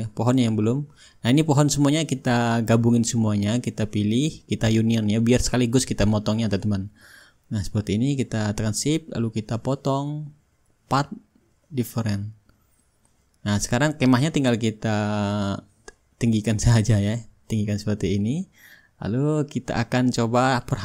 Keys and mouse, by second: 0.7-5.5 drag, 6.0-9.3 drag, 9.9-10.4 drag, 11.4-13.2 drag, 13.5-17.9 drag, 14.3-15.8 middle drag, 19.9-20.8 drag.